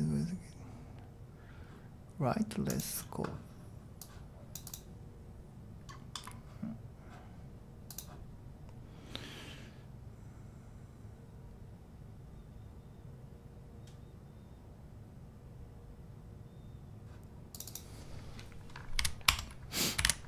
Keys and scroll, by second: 19.0-20.2 typing, 19.3 Tab.